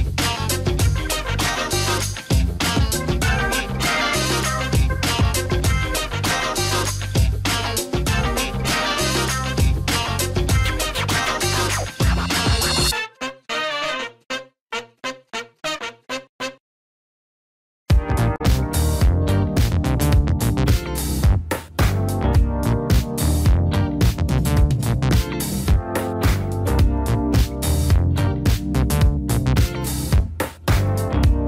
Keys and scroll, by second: 0.0-2.0 typing, 3.9-5.9 typing, 5.9 Up, 6.3 Up, 6.5 Up, 6.7 Up, 6.8 Up, 7.2 Up, 7.4 super+Return, 17.9 alt+q, 21.5 ctrl+space, 26.9 Down, 27.1 Down, 27.2 Down, 27.4 Down, 27.6 Right, 27.9 Up, 28.1 Up, 29.7 Up, 30.3 Escape.